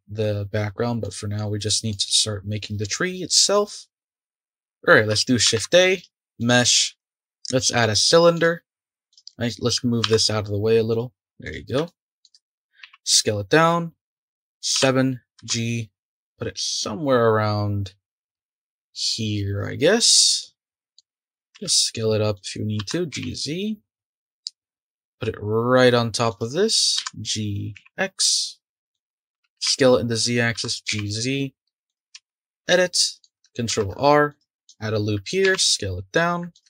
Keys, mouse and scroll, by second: 0.6-1.0 scroll up 2, 1.0-3.6 middle drag, 3.6-4.1 scroll up 2, 4.1-5.4 scroll down 2, 5.4 shift+a, 9.1 click, 10.0 g, 11.4 click, 11.8-12.4 shift+middle drag, 12.4 click, 12.8 s, 14.7 KP_7, 15.4 g, 20.4-21.5 middle drag, 21.5 s, 22.8 g, 26.9 g, 28.9-29.3 shift+middle drag, 29.3 s, 30.5 g, 32.1 Tab, 32.7 middle click, 33.7 ctrl+r, 35.4 s.